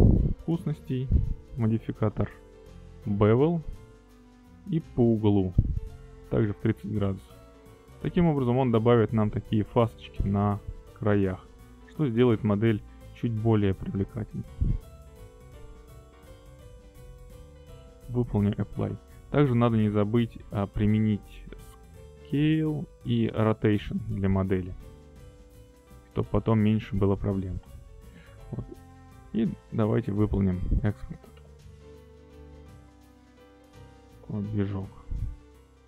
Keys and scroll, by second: 20.0 ctrl+a, 31.0 q, 32.7 Return.